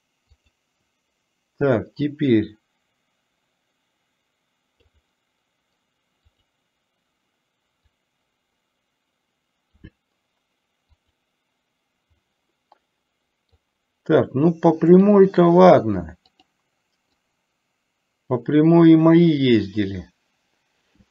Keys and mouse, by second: 0.4 click, 2.1-5.1 drag, 6.4 click, 8.1-9.9 drag, 11.1 click, 12.3-12.8 middle drag, 12.9-13.7 middle drag, 15.1 click, 16.4 click, 17.4-21.1 drag.